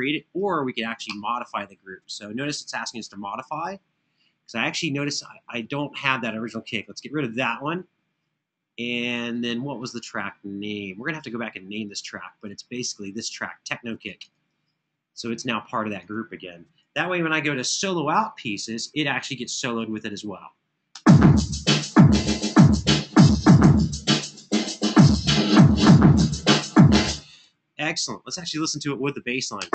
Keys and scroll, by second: 16.7 super+=, 20.7 space, 26.8 space, 27.3 super+=.